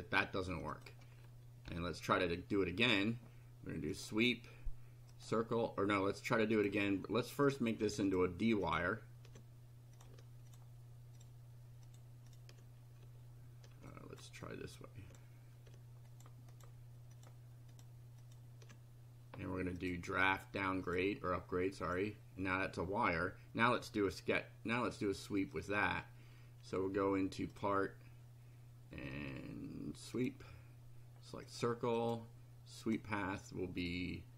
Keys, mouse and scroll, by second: 0.7 click, 1.7 Delete, 2.9 click, 3.9 click, 5.1 click, 6.5 click, 7.5 click, 8.1 ctrl+click, 8.6 ctrl+click, 10.0 ctrl+click, 10.5 ctrl+click, 11.2 ctrl+click, 11.9 ctrl+click, 12.3 ctrl+click, 13.9 ctrl+click, 14.6 click, 16.1 ctrl+click, 16.5 ctrl+click, 17.1 ctrl+click, 17.7 ctrl+click, 18.2 ctrl+click, 19.8 click, 20.9 click, 21.9 click, 23.1 scroll down 2, 23.7 scroll up 2, 25.5 click, 27.5 click, 30.2 click, 31.5 click, 32.0 click, 32.9 click.